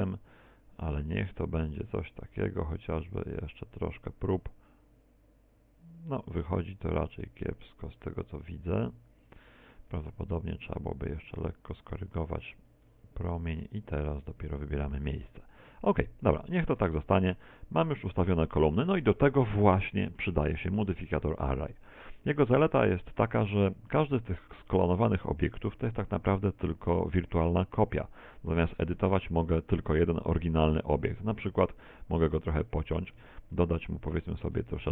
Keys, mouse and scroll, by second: 9.4 shift+click, 10.0 r, 13.0 shift+click, 13.4 g, 17.0 shift+click, 17.0 z, 17.4 middle click, 18.7 middle click, 19.9 middle click, 20.5 shift+middle click, 23.9 middle click, 25.6 right click, 29.0 Tab, 29.5-30.6 scroll up 3, 30.6 scroll up 1, 31.3 ctrl+r, 33.0 click, 33.2 a, 33.6 z, 34.0 middle click, 34.6 b.